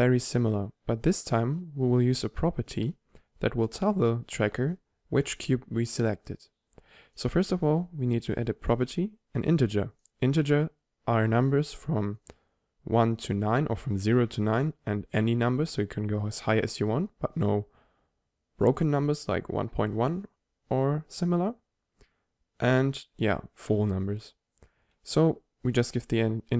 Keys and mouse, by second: 10.0 click, 11.6-13.2 drag, 23.7-25.6 drag.